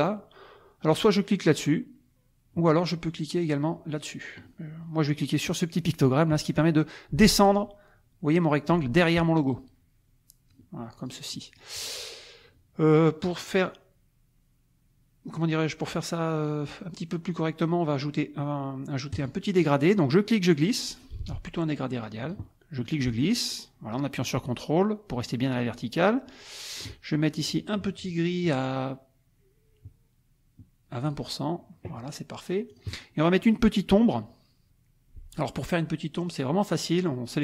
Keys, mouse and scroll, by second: 7.4 click, 9.5-10.7 drag, 11.0 click, 11.8 click, 19.1 click, 20.1 click, 21.2 ctrl+z, 22.2 click, 22.8-27.0 ctrl+drag, 27.3 ctrl+click, 31.0 click, 32.7 click.